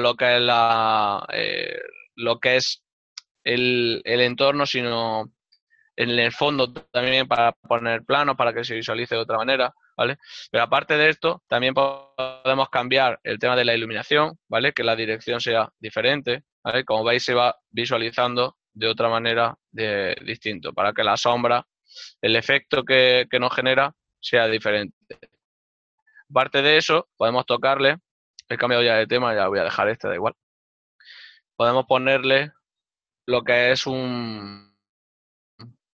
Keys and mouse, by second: 27.4 shift+middle click, 33.0 click.